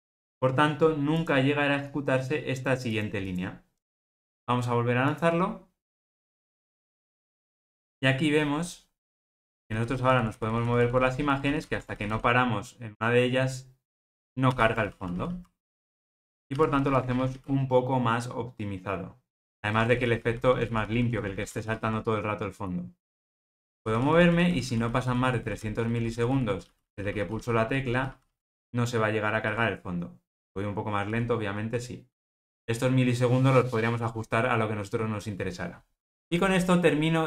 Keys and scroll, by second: 0.2 alt+super+[, 5.1 ctrl+r.